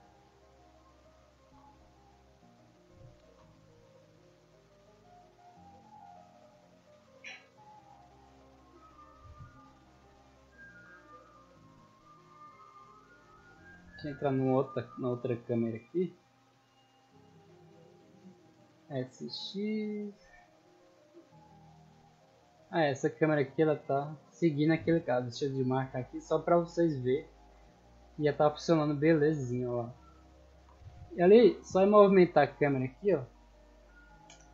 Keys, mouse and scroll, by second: 0.3 click, 1.3 shift+s, 2.0 click, 2.6 right click, 3.9 click, 4.2-4.9 middle drag, 5.3 s, 6.2 click, 6.8-7.1 middle drag, 8.1-9.7 drag, 10.2 s, 10.7 x, 11.5 click, 12.7 click, 14.2 right click, 17.8 right click, 18.5 s, 20.4 click, 21.2 p, 22.6 Escape, 23.5 right click, 24.9 click, 26.2-27.5 drag, 28.0 p, 28.8 w, 29.1 a, 30.2 d, 30.4 a, 30.8 Escape, 31.8 middle click, 33.3 right click.